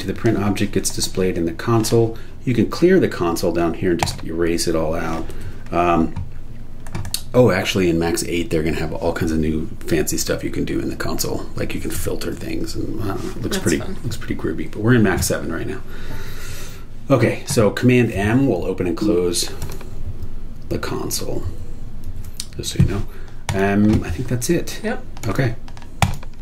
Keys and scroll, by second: 18.8 super+m, 20.0 super+m.